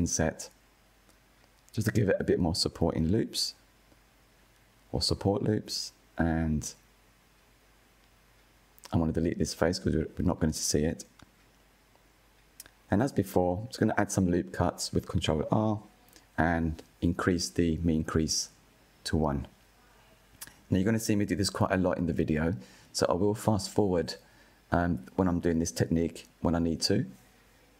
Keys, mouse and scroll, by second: 5.7 click, 6.2 click, 7.4 Delete, 10.5-11.5 middle drag, 11.5-11.9 scroll up 1, 11.9-12.6 shift+middle drag, 12.6-13.4 scroll up 2, 13.4-16.3 shift+middle drag, 16.3 ctrl+r, 19.5 ctrl+r, 21.3 ctrl+r, 24.1-25.5 drag, 26.3-27.6 drag.